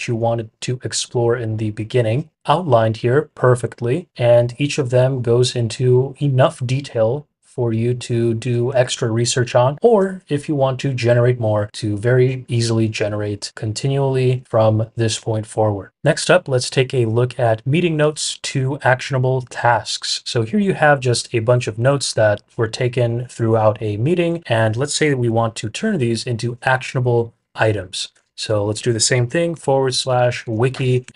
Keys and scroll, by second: 28.1 typing, 29.5-31.1 typing.